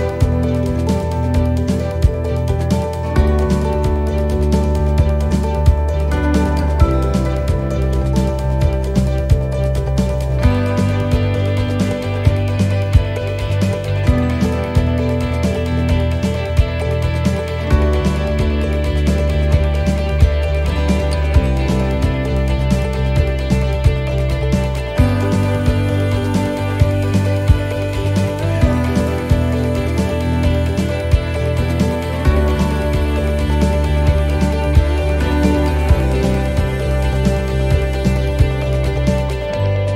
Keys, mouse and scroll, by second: 0.6 shift+right click, 2.3 shift+right click, 3.3 middle click, 4.0 shift+middle click, 4.6 scroll up 1, 5.0 middle click, 6.2 shift+middle click, 7.0-7.3 scroll up 3, 7.8 shift+right click, 8.5 shift+right click, 9.2 shift+right click, 9.6 shift+right click, 10.0 shift+right click, 10.3 shift+right click, 10.6 shift+right click, 11.0 shift+right click, 11.4 shift+middle click, 12.9 shift+right click, 13.2 shift+right click, 13.6 shift+right click, 14.0 shift+right click, 14.2 shift+right click, 14.7 shift+right click, 14.9 shift+right click, 15.3 shift+right click, 16.0 scroll down 2, 16.4 shift+middle click, 17.0 middle click, 17.3-18.0 scroll down 4, 18.0 shift+middle click, 18.5 scroll down 1, 19.6 e, 21.7 click, 23.9 middle click, 25.0 middle click, 27.3 shift+middle click, 27.8 scroll up 5, 28.3 shift+middle click, 28.9-29.3 scroll down 3, 29.5 middle click, 32.8 l, 33.5 middle click, 33.8 scroll down 2, 34.2 middle click, 34.7 scroll down 1, 35.1 middle click, 39.8 click.